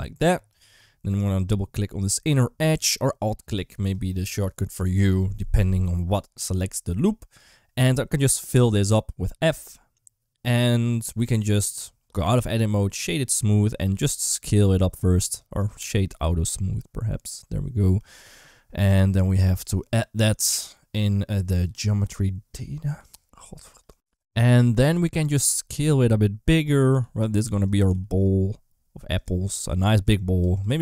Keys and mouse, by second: 1.2 click, 2.5 g, 8.4 f, 11.0 Tab, 12.3-13.2 right drag, 13.7 s, 15.5-17.2 right drag, 21.5 click, 23.8 ctrl+z, 25.5 s, 26.8 s, 27.7 g, 29.9 Tab, 30.2 2, 30.5 click.